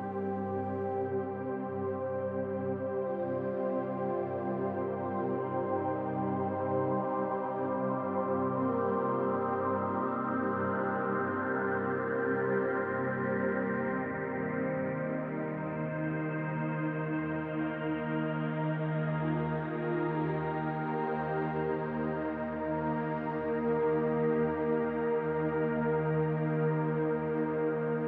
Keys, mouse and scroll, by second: 2.3-2.7 scroll up 2, 2.8 shift+middle click, 3.1 shift+middle click, 4.4 click, 4.9 middle click, 8.3-8.8 scroll down 1, 8.8 middle click, 9.8 middle click, 11.3 middle click, 13.5 middle click, 15.1 middle click, 17.9 middle click, 18.5 scroll up 1, 18.8 middle click, 19.7 click, 20.1 middle click, 21.1 shift+click, 21.5 middle click, 23.1 middle click, 24.6 m, 26.9 click, 27.9 shift+click.